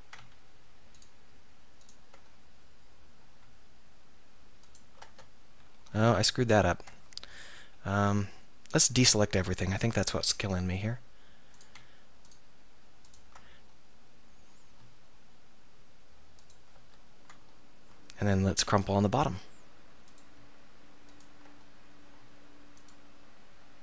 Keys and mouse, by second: 2.3 click, 2.5 middle click, 2.6 click, 4.2-6.0 middle drag, 6.4 ctrl+z, 8.1-9.1 middle drag, 9.1 a, 10.3 k, 18.6 k, 19.5-21.8 drag, 21.9 click, 22.1 click.